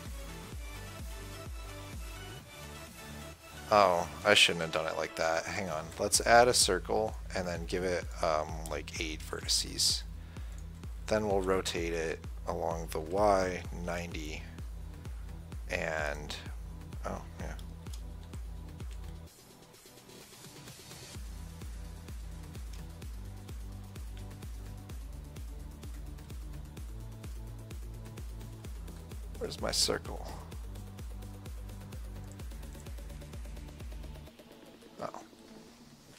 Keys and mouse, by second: 0.2 s, 5.0 x, 6.1 shift+a, 8.4-14.9 drag, 11.6 r, 18.6 r, 25.6-27.4 middle drag, 32.5-35.3 drag, 34.4 middle click, 34.4 right click.